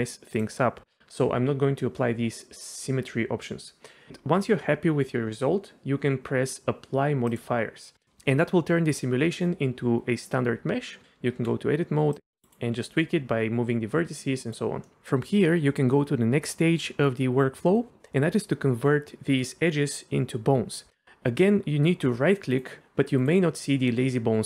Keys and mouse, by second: 0.3 click, 7.4-11.0 drag, 11.0 Tab, 12.4 g, 12.4 click, 12.8 g, 14.4 click, 14.9 middle click, 22.6 click, 22.8 Escape, 23.3-24.4 drag.